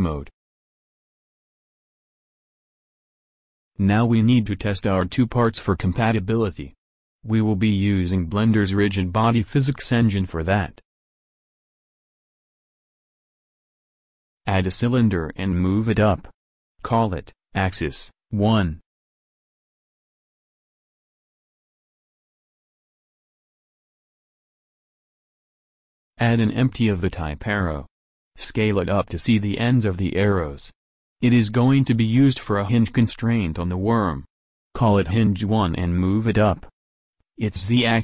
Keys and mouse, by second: 0.0 KP_1, 13.4 shift+a, 18.6 g, 22.1-23.9 drag, 26.5 shift+a, 30.9 s.